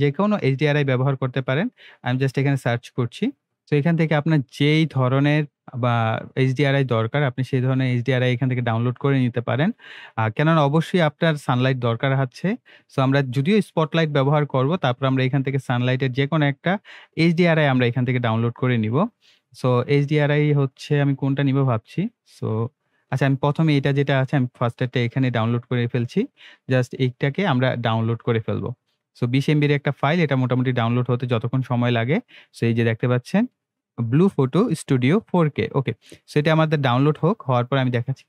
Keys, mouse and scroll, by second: 0.4 scroll down 1, 1.2 scroll up 1, 2.2 click, 3.6 scroll up 1, 7.7 scroll down 1, 9.6 scroll down 1, 11.7 scroll up 1, 15.4 scroll down 1, 17.6 scroll up 1, 24.7 click, 28.0 click.